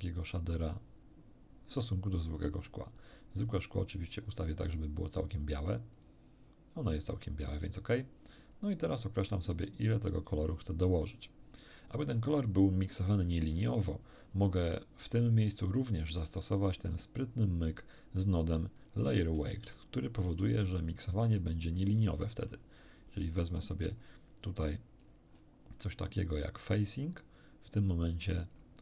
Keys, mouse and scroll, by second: 3.5 click, 5.9 click, 8.5-12.3 drag, 15.0-15.7 drag, 16.1-17.3 drag, 18.7 click, 19.5 shift+d, 21.5 click, 22.1 middle click, 23.0-24.1 drag, 24.7 click, 25.3 scroll up 1, 25.8 middle click, 26.9-28.7 drag.